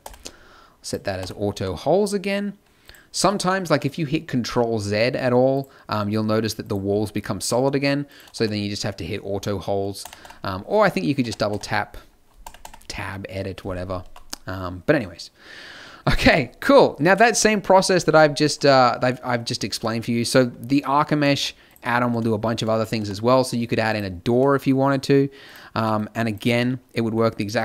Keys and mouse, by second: 0.0 t, 1.1 t, 1.5 a, 3.1 z, 3.6 z, 8.3 t, 9.3 t, 10.0 Tab, 10.2 Tab, 11.2 Tab, 11.5 Tab, 12.4 Tab, 12.6 Tab, 14.0 a, 18.7 z, 21.3 shift+s, 22.9 t, 25.8 g, 26.3 z, 27.4 click.